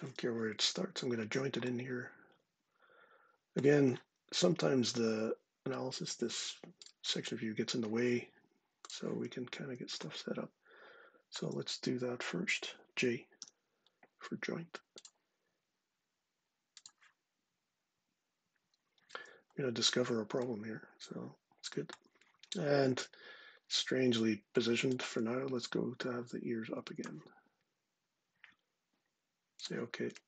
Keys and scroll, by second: 13.1 j.